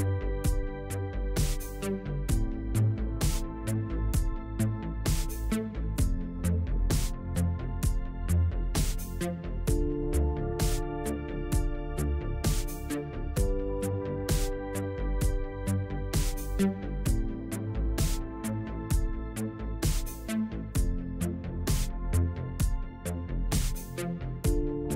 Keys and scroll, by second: 1.4 KP_7, 8.9 ctrl+z, 13.1 a, 13.7 a, 14.6 u.